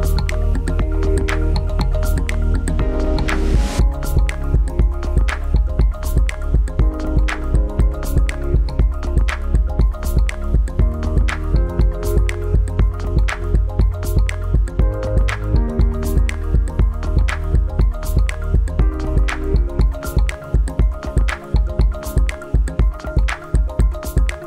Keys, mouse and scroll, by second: 1.4 click, 14.3 click.